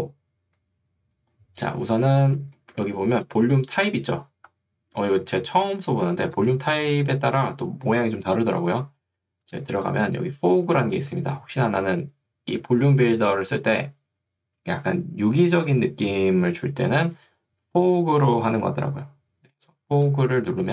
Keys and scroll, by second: 3.0 ctrl+2, 6.8 Escape.